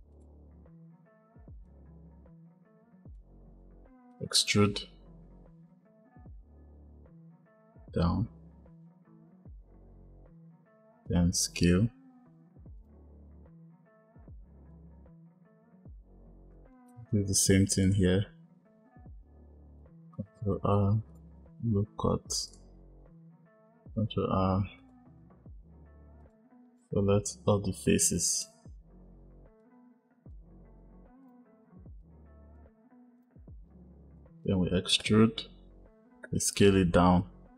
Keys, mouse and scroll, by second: 0.0 click, 1.5 shift+click, 3.8 ctrl+z, 3.9 e, 14.6 click, 17.7 click, 19.6 ctrl+r, 23.9 ctrl+r, 26.5 click, 28.2-29.5 drag, 31.2 click, 31.9 shift+click, 33.1 click, 35.0 e.